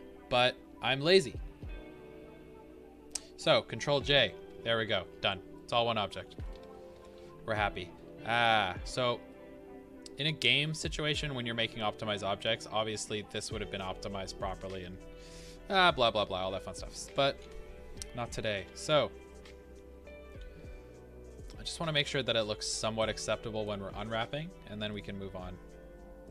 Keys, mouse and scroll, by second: 4.0 ctrl+j, 5.2 Tab, 5.5 middle click, 6.5 Tab, 7.3 scroll up 1, 8.7 scroll down 1, 9.2 middle click, 11.9 middle click, 15.4 Tab, 16.4 middle click, 17.1 Tab, 17.4 a, 19.2 scroll down 1, 20.1-21.4 middle drag, 21.4-26.3 drag.